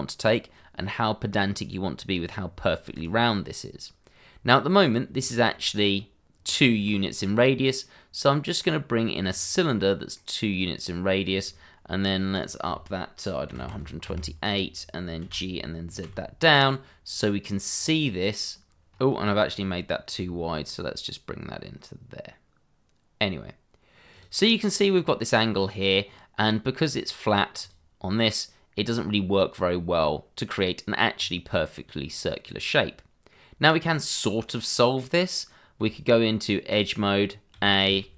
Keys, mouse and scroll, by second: 2.4 scroll down 1, 2.9 click, 6.7 shift+a, 9.3 click, 10.1 middle click, 12.3 click, 13.5 1, 13.5 2, 13.8 8, 14.0 Return, 15.2 g, 16.0 z, 17.7 click, 19.5 click, 21.6-22.0 scroll up 2, 21.8 shift+middle click, 22.2 s, 24.1 click, 24.4 scroll up 1, 26.9 scroll down 1, 27.6 click, 28.9 scroll up 1, 29.9 scroll down 1, 32.6 middle click, 35.8 Tab, 37.5 a.